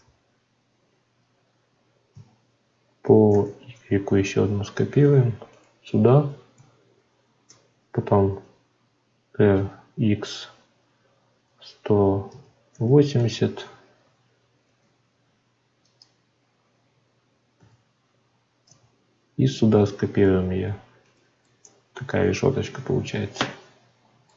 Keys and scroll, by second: 14.6 shift+d, 18.6 y.